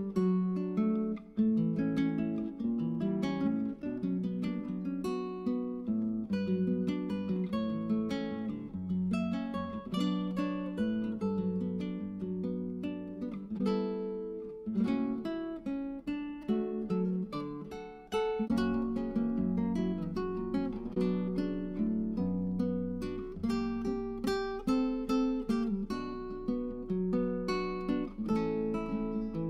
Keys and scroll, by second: 22.1-25.2 typing, 28.7 (.